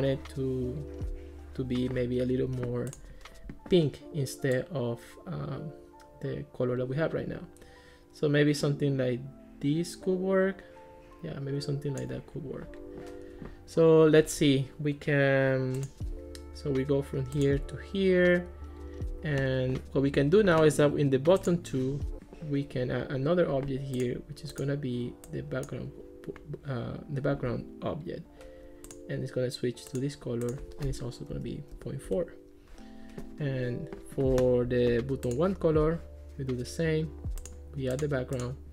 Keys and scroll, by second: 31.3 ., 31.8 4, 32.1 Return.